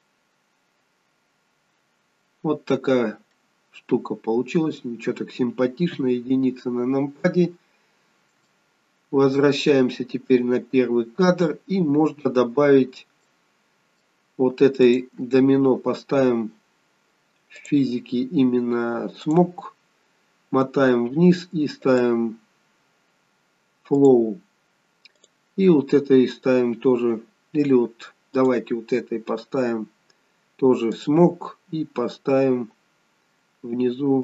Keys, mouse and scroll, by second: 0.9 click, 1.3-1.9 scroll down 3, 1.9-2.3 scroll up 2, 2.5-2.8 scroll down 2, 3.3 middle click, 5.8 KP_1, 7.1-7.8 scroll down 2, 8.4 shift+middle click, 10.4 click, 12.8 scroll up 2, 13.2 middle click, 14.8 click, 17.5 click, 19.3 click, 19.8-21.9 scroll down 13, 21.9 click, 21.9 scroll down 1, 25.2 click, 28.4 click, 30.9 click, 33.3-33.8 scroll down 10.